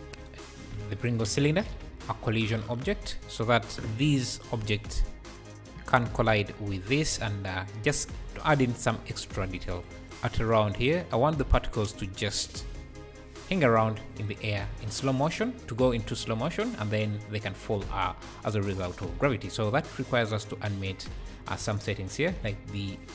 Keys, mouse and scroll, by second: 1.2 click, 2.4-4.3 drag, 4.3 shift+right click, 4.7 space, 5.9 space, 6.3 `, 7.3 `, 8.4 KP_3, 9.1 r, 9.3 r, 10.0 shift+right click, 10.2 space, 11.3 space, 14.2 click, 20.1 click, 20.6-22.9 scroll down 20, 22.9-23.1 drag.